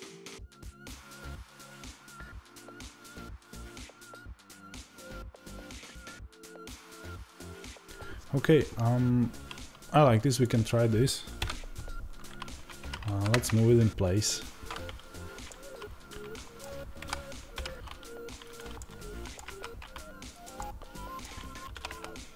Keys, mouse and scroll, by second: 11.3 KP_Divide, 12.7 g, 14.1 click, 15.4-22.3 middle drag, 16.9 KP_7, 17.4 g, 21.6 r.